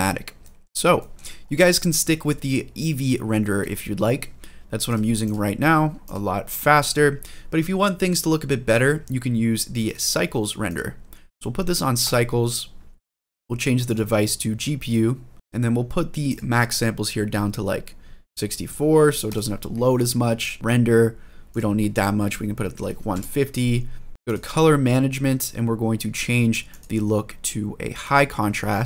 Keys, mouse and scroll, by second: 0.2 middle drag, 0.8 shift+middle drag, 1.2-1.8 scroll down 1, 1.8 scroll up 2, 2.2 scroll down 1, 2.6 middle click, 3.5 scroll down 1, 3.8-4.7 scroll up 2, 4.7 click, 5.0 click, 5.8 click, 6.6 click, 9.6 drag, 10.4-12.0 drag, 13.6-14.7 drag, 16.0-19.2 drag, 21.3-23.5 drag, 24.1 drag, 24.1-25.1 scroll down 6, 26.5-28.0 drag.